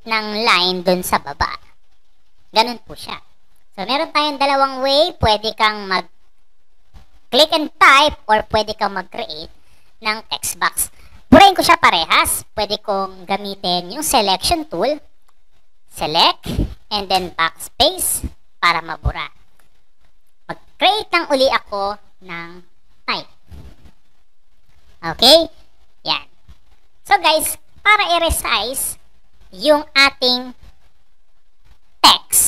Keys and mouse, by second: 0.0-2.8 typing, 4.1 click, 5.0 click, 8.2 click, 15.1-16.0 drag, 17.1 BackSpace, 20.5 click, 21.3 click, 22.6-24.0 typing.